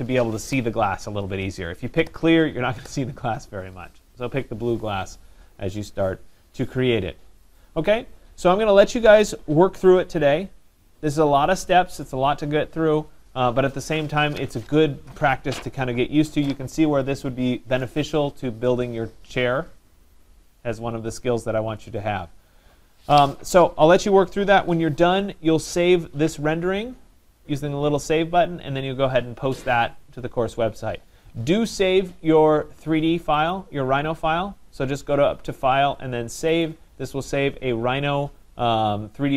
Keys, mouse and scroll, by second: 33.5 click, 35.6 click, 36.6 click.